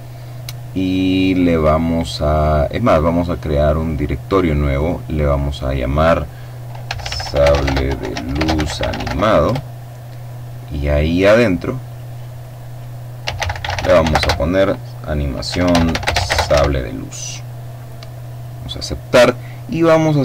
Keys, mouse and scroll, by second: 3.2 click, 4.2 click, 6.3-8.5 typing, 8.9 Return, 11.3 click, 12.7-13.6 typing, 14.9-15.9 typing, 17.7 click, 19.2-19.8 scroll down 2.